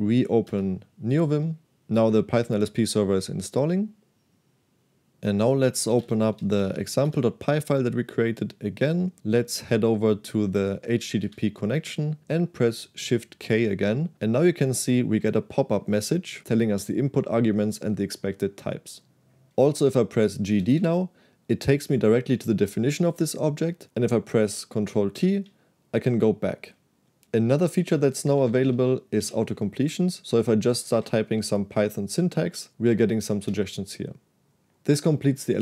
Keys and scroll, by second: 0.0-0.3 typing, 0.6 Return, 5.8-7.2 typing, 8.9-9.7 typing, 11.0 f, 11.3 shift+h, 13.1 shift+k, 20.5 g, 20.8 d, 25.2 ctrl+t, 28.4 k, 28.6 k, 28.7 k, 29.2 o, 30.9 i, 32.7 Delete, 33.5 f.